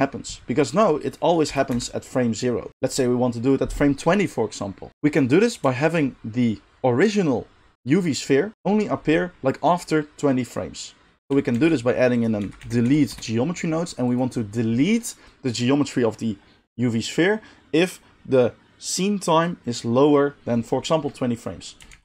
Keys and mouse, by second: 1.5 space, 1.7 space, 4.9-11.2 middle drag, 11.2-14.2 shift+drag, 11.2 shift+a, 11.5 shift+a, 14.2-22.0 middle drag, 21.9 shift+a.